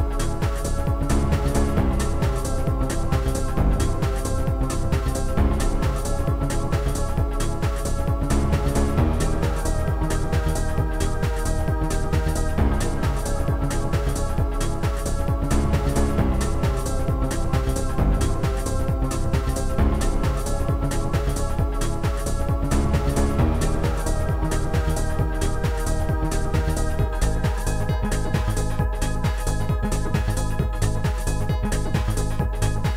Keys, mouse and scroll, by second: 0.6 click, 1.4 click, 1.9 click, 2.5 click, 3.1 click, 4.2 click, 5.5 click, 6.2 click, 6.7 click, 6.8 click, 7.6 click, 9.1 click, 11.0 click, 11.8 click, 12.9 right click, 14.4 click, 14.7 right click, 15.6 click, 15.6 right click, 15.9 shift+click, 17.4 shift+click, 19.8 shift+click, 20.3 click, 20.5 click, 25.1 click, 25.6 ctrl+click, 25.9 ctrl+click, 29.3 ctrl+click.